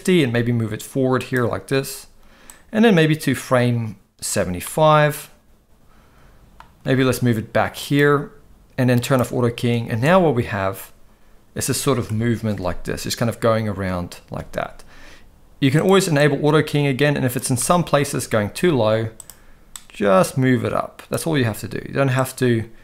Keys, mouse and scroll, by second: 0.2 g, 2.5-4.3 drag, 4.6-6.5 middle drag, 6.8 g, 9.0 click, 9.9 space, 12.1 KP_0, 14.4 space, 15.8-17.4 drag, 17.6-18.1 middle drag, 18.6 g, 19.8-21.1 drag, 21.4 g.